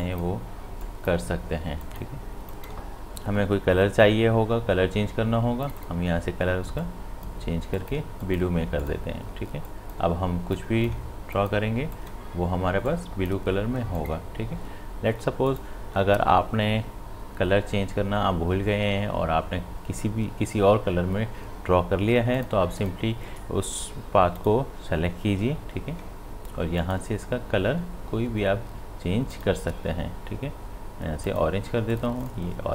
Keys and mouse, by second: 5.6-14.0 drag, 22.3 click, 26.8 click, 29.3 click.